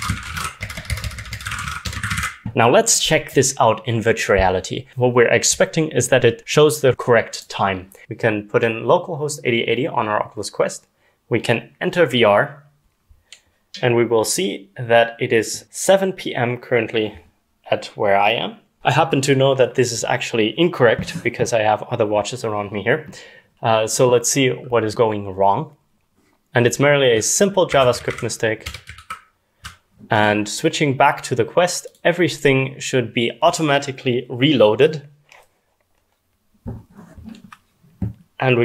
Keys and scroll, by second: 0.0-2.8 typing, 26.5 Escape, 26.5-29.0 typing, 28.6 Escape, 29.0 ctrl+s, 31.7 typing.